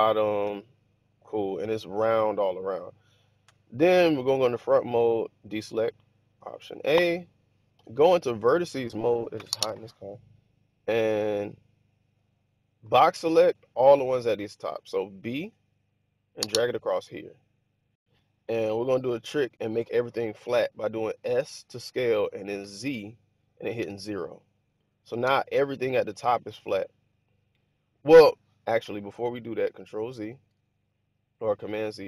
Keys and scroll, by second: 0.5 typing, 3.4 1, 6.3 alt+a, 12.7 b, 21.1 s, 22.5 z, 23.7 0, 25.1 Return, 30.2 super+z.